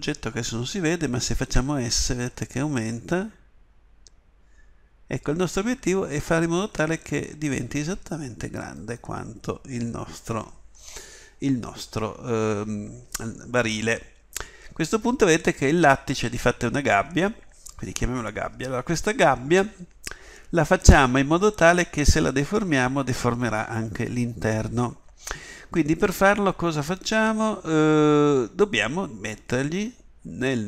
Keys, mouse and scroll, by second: 1.4 s.